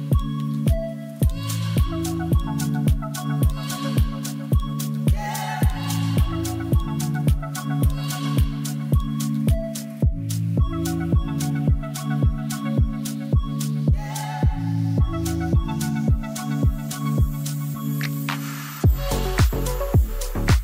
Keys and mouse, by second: 0.2 middle click, 1.0-2.4 drag, 1.3 0, 2.4 middle click, 3.1 middle drag, 3.7 shift+middle click, 5.6 shift+d, 6.3 shift+z, 7.1 shift+drag, 7.4 drag, 7.9 r, 8.0 r, 8.9 g, 9.1 z, 10.3 click, 10.7 click, 10.8 middle drag, 11.3 shift+middle click, 11.5 middle drag, 12.4 middle click, 13.4 shift+middle drag, 14.0-19.1 drag, 19.2 middle drag.